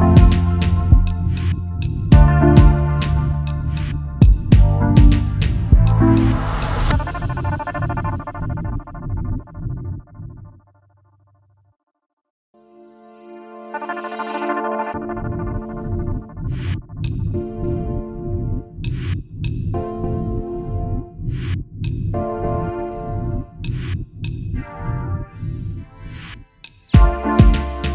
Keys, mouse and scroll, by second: 13.1-15.7 scroll down 1, 15.7-16.5 scroll up 1, 19.5 ctrl+shift+], 20.4 ctrl+shift+], 20.6 alt+scroll down 1, 21.7 double click, 22.2-22.6 alt+scroll down 1, 22.6 alt+scroll up 1, 23.2-23.5 alt+scroll down 1, 23.9 space, 24.0 double click, 25.1 space.